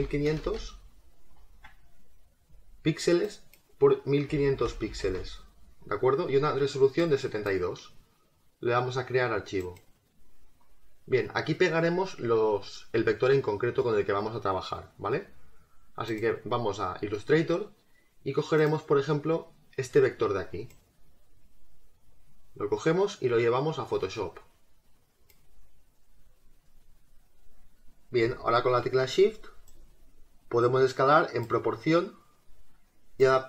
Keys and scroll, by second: 23.7 space.